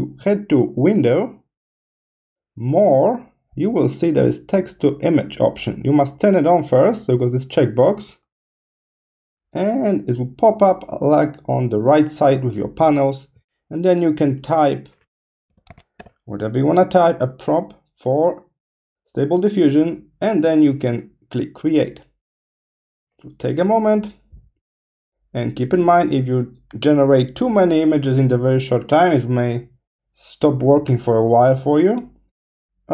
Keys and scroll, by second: 15.2-16.4 typing.